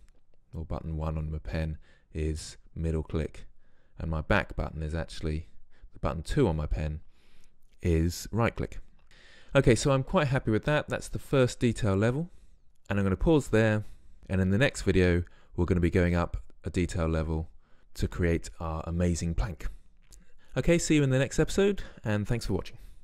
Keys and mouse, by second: 8.8 middle drag, 9.1-9.9 middle drag, 12.7-15.0 middle drag.